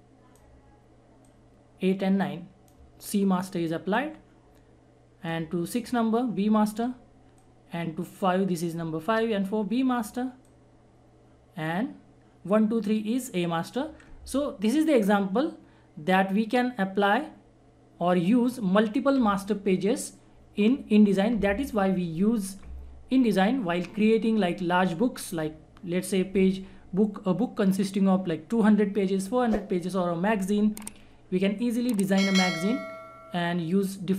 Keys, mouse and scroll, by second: 6.6-7.4 shift+scroll up 1, 7.4-9.2 shift+drag, 9.2-10.4 shift+scroll up 1, 10.4-16.3 shift+drag, 31.8-34.1 shift+drag.